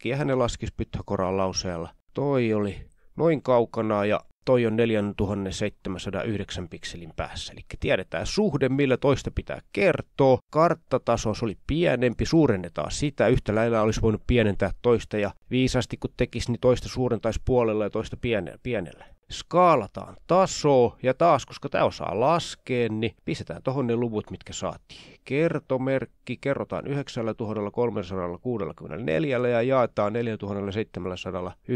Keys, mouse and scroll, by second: 0.0-2.7 drag, 2.9-5.3 drag, 7.0 click, 9.8-10.5 drag, 11.5 click, 14.8 click, 18.3 shift+ä, 20.2 shift+*, 20.8 9, 22.6-25.0 typing, 26.7-29.9 typing, 31.6 click.